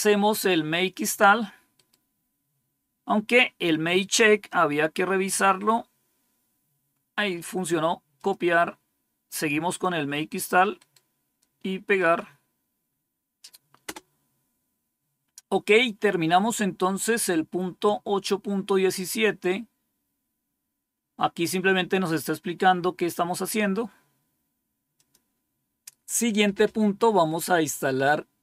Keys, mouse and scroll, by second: 1.7 right click, 8.1 click, 10.7 right click, 11.9 click, 13.8 Return, 17.3 scroll down 1, 18.1-18.6 scroll down 4, 24.9 click.